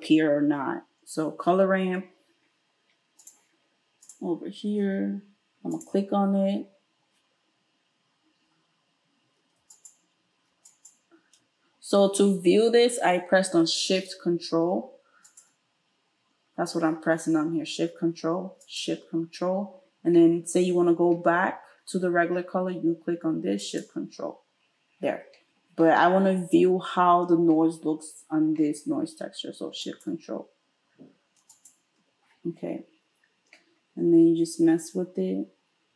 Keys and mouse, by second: 4.1-5.7 middle drag, 5.7 click, 5.8 middle click, 9.7 alt+shift+click, 10.7 ctrl+shift+click, 11.3-15.3 ctrl+shift+middle drag, 15.3 ctrl+shift+click, 15.4 ctrl+shift+middle click, 18.6 ctrl+shift+click, 23.7 ctrl+shift+click, 29.9 ctrl+shift+click, 31.5 ctrl+shift+click, 31.6-34.6 ctrl+shift+middle drag, 34.6-35.9 drag.